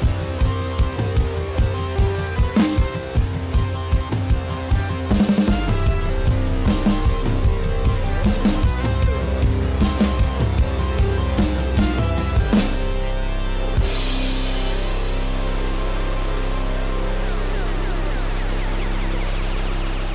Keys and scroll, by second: 6.8 ctrl+alt+z.